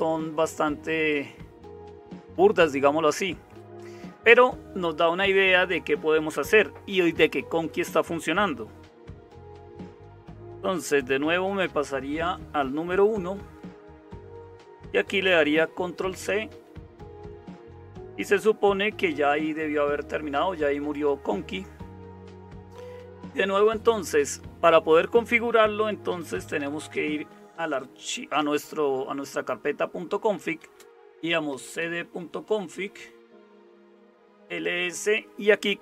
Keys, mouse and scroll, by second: 0.0-35.8 typing, 13.2 super+1, 15.9 ctrl+c, 17.2 Return, 17.3 Return, 18.9 super+0, 33.0 Return.